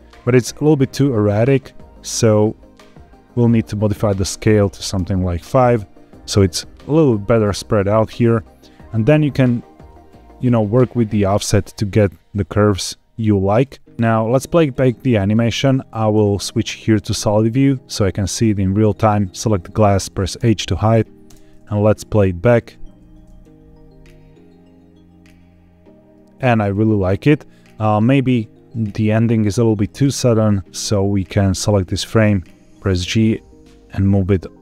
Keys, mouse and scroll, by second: 0.8 click, 2.2 click, 4.0 click, 9.8-13.5 shift+drag, 13.9 ctrl+z, 13.9 click, 16.0 z, 18.7 click, 20.3 h, 21.2 space, 29.8 space, 30.2 click, 31.4 click, 32.1 g, 32.3 x.